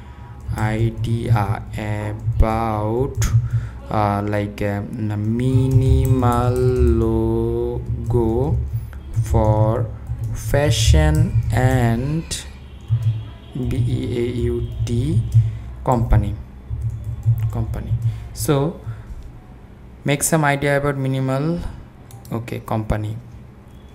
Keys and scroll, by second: 0.0-3.7 typing, 5.2-18.1 typing.